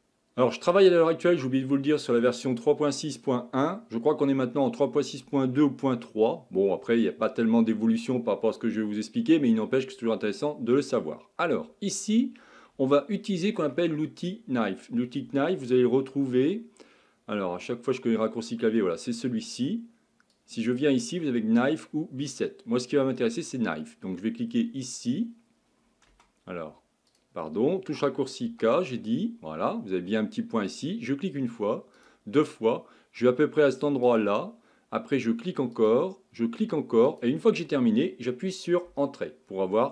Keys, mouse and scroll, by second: 11.7-12.6 scroll up 1, 12.6-13.0 scroll down 1, 13.0-16.0 shift+middle drag, 19.5 click, 26.1 space, 28.5 k.